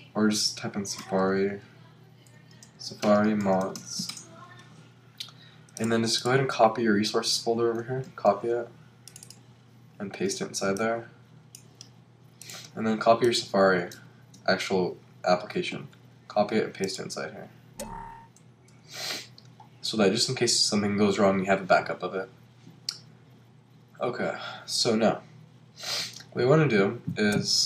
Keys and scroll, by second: 3.4 shift+m, 4.1 Return, 8.1 super+c, 10.0 super+v, 15.7 super+c, 18.4 super+v.